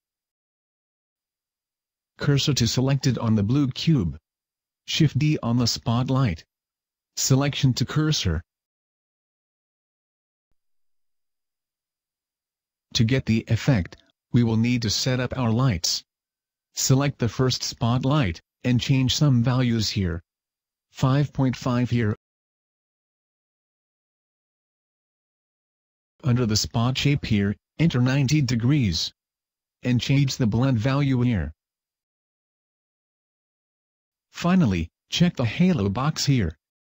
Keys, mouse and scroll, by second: 0.0 shift+s, 2.9 Tab, 3.4 right click, 5.0 shift+d, 5.7 click, 6.9 shift+s, 13.1 right click, 15.6 click, 17.8 click, 18.3 click, 26.4-27.4 scroll down 3, 27.4 click, 31.7 click, 36.6 click.